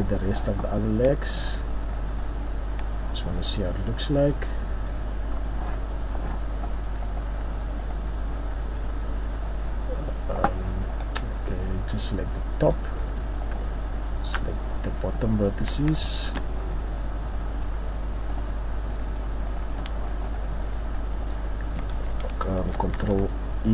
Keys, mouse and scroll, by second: 1.0 click, 2.1 scroll down 1, 2.7 middle click, 2.7-3.3 scroll down 1, 3.3-4.3 scroll up 2, 3.8 middle click, 4.3-4.8 scroll up 1, 4.8 middle click, 4.8-5.3 scroll down 1, 5.8-6.6 scroll up 2, 7.9 click, 8.5 middle click, 9.1-9.5 scroll down 2, 9.4 middle click, 9.9-10.5 scroll up 3, 11.5 right click, 12.7 Tab, 13.5 right click, 14.4-14.7 scroll down 3, 14.7 middle click, 16.0 shift+right click, 16.3 shift+scroll down 3, 16.7 middle click, 18.3 shift+right click, 18.9 shift+middle click, 19.5 shift+right click, 19.9 shift+scroll down 2, 20.1 scroll up 1, 20.1 middle click.